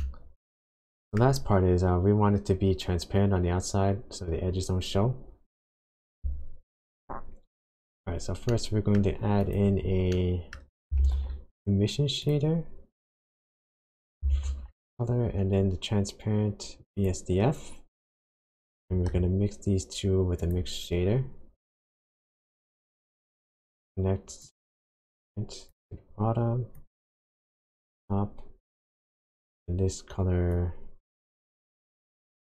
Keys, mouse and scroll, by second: 0.1 shift+middle click, 1.3 shift+scroll up 1, 7.5 click, 7.6-8.5 scroll up 6, 8.5 middle click, 9.1-9.5 scroll up 1, 9.5 click, 10.1 middle click, 10.7 click, 10.9 shift+a, 14.3 shift+a, 18.7 shift+a, 22.8 click, 24.4 click, 26.8 click, 28.9 click, 30.5 click.